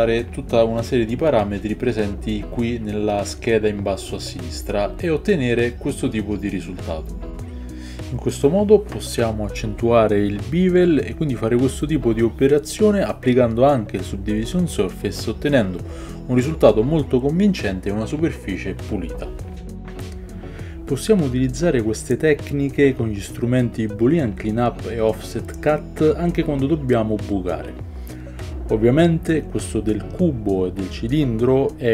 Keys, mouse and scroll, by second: 6.3 ctrl+click, 6.4-8.1 shift+middle drag, 8.1 ctrl+click, 8.2 shift+middle click, 9.0 ctrl+click, 9.2-12.4 middle drag, 11.9 Tab, 12.4 alt+click, 12.6-18.3 alt+middle drag, 13.5 ctrl+b, 15.7 Tab, 18.3 click, 18.4-25.6 ctrl+middle drag, 19.1 ctrl+3, 20.0-23.2 typing, 24.3 shift+click, 25.1 ctrl+KP_Subtract, 25.4 h, 25.7 ctrl+KP_Subtract, 25.7-31.9 shift+middle drag, 25.7 h, 26.2 click, 26.8 click, 27.1 Tab, 27.4 Tab.